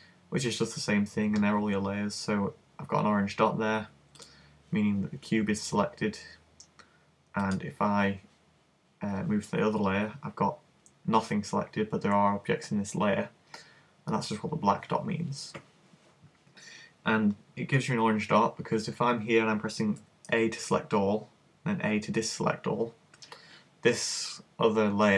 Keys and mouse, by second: 4.2 click, 7.5 click, 20.0 a, 21.5 a.